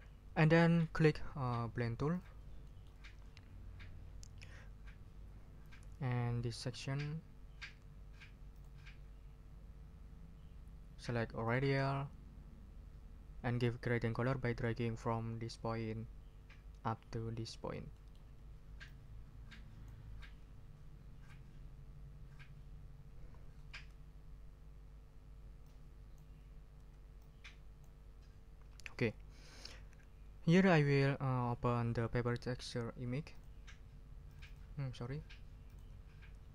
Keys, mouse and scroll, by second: 2.1 click, 2.6 ctrl+click, 3.0 ctrl+scroll down 2, 8.5 click, 11.4 click, 17.9 ctrl+middle click, 18.8-20.0 drag, 23.7 ctrl+z, 25.6 click, 25.9-26.3 scroll up 2, 26.7 ctrl+z, 27.2 ctrl+click, 27.8 scroll up 1, 33.3 click, 34.3 click, 35.6 click.